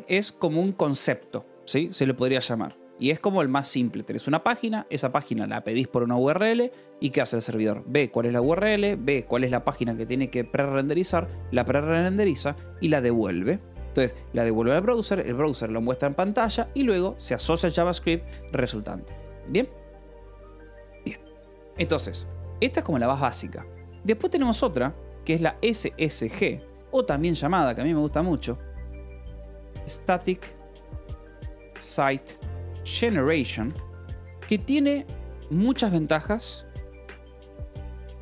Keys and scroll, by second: 0.0 2, 0.2 BackSpace, 1.0 space, 2.4 Escape, 2.6 k, 5.6 shift+v, 6.2 Escape, 14.1 Escape, 17.7 Escape, 19.4 Escape, 20.7 j, 22.0 a, 25.9 shift+s, 26.5 Escape, 27.2-33.7 typing, 27.6 Escape, 29.0 Return.